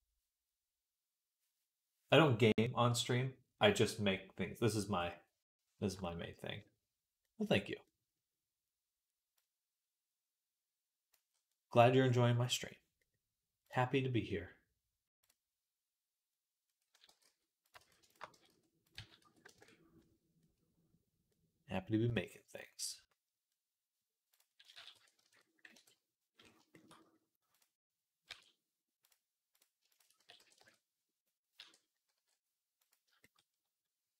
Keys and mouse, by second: 13.5-15.1 middle drag, 16.9 g, 17.6 ctrl+z, 17.9 shift+click, 18.2 g, 18.8 s, 20.0-21.1 drag, 21.1 middle click, 21.8-23.5 drag, 23.5-26.2 drag, 24.6 s, 25.6 KP_3, 28.1 e, 30.0 s, 31.4 e.